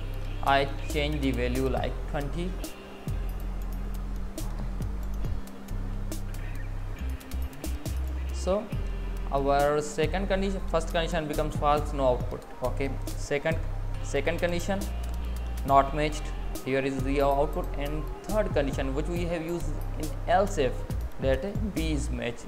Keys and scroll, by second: 2.0 Left, 2.0 Down, 2.1 Left, 2.6 Up.